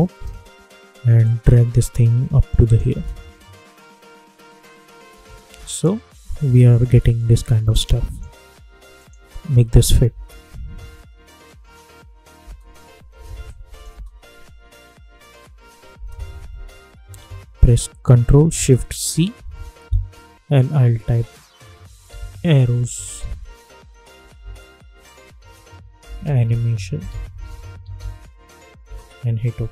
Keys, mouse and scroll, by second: 1.2-2.8 drag, 2.8 space, 6.8 space, 7.6 click, 8.1 -, 8.9 click, 10.0 space, 12.3 space, 13.4 click, 13.8 space, 19.0 ctrl+shift+c, 21.4-23.6 typing, 25.1-28.4 typing, 28.8 Return.